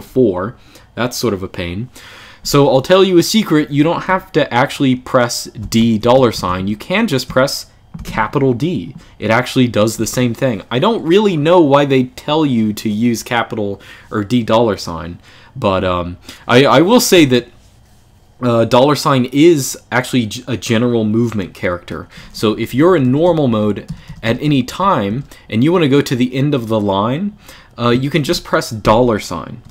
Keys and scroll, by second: 5.3 d, 5.8 shift+4, 6.2 Escape, 6.3 u, 7.7 shift+d, 16.9 u, 22.0-25.3 typing, 28.6 shift+4.